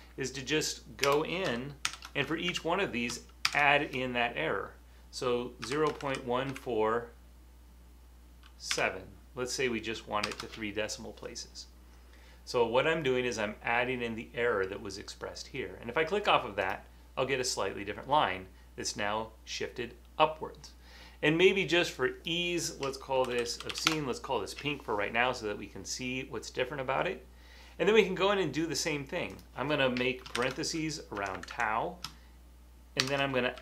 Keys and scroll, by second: 1.0-3.4 typing, 5.8-6.6 typing, 8.7-10.4 typing, 23.0-24.2 typing, 25.3 typing, 30.5 shift+9, 31.1 Right, 31.3 Right, 31.5 Right, 33.0-33.6 typing.